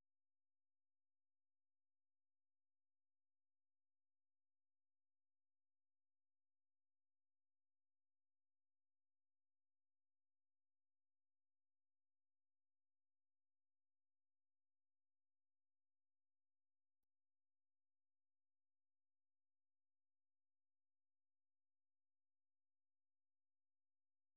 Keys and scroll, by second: 0.0-0.3 typing, 2.9-3.5 typing, 6.8 typing, 8.6 typing, 19.9 ctrl+c, 21.1 super+2, 21.5 super+1, 22.2-23.0 typing.